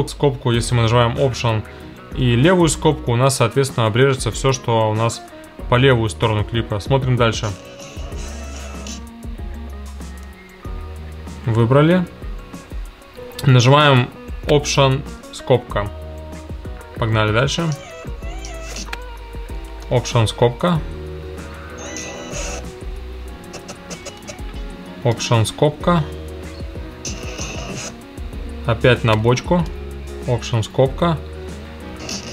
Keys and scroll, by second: 1.5 alt+], 3.7 alt+[, 7.3 space, 8.9 space, 15.1 alt+], 15.9 alt+], 17.1 space, 18.8 space, 19.8 alt+], 20.3 alt+], 21.2 space, 22.5 space, 23.4 Left, 25.1 alt+], 26.4 space, 27.8 space, 29.7 alt+], 30.5 alt+], 31.9 space.